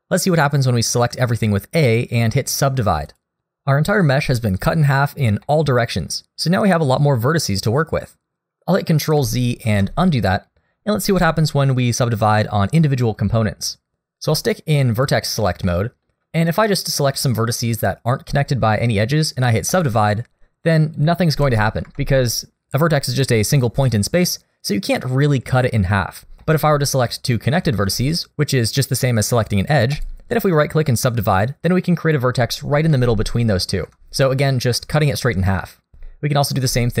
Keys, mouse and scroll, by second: 4.7-5.4 scroll up 2, 5.4 middle click, 9.6 ctrl+z, 15.0 click, 15.7 middle click, 16.8 shift+click, 18.7 right click, 21.0 click, 21.3 g, 26.4 middle click, 27.6 shift+click, 29.9 right click, 32.0 click, 32.9 g, 35.9 ctrl+z.